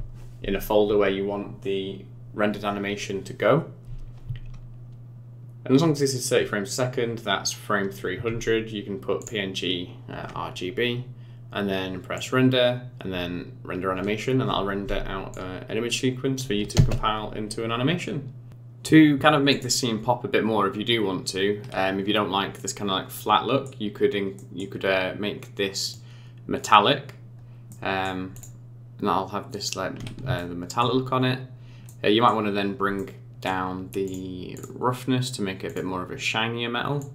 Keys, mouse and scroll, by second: 9.3 click, 12.1 click, 15.3 click, 16.7 space, 17.5 scroll up 4, 18.0-18.3 scroll down 3.